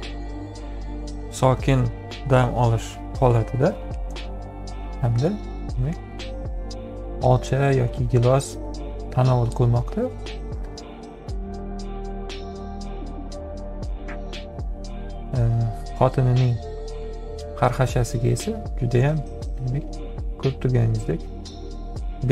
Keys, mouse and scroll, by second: 1.8 ctrl+click, 3.8 ctrl+v, 5.3 ctrl+click, 12.6 click, 17.1 F7, 18.9 click.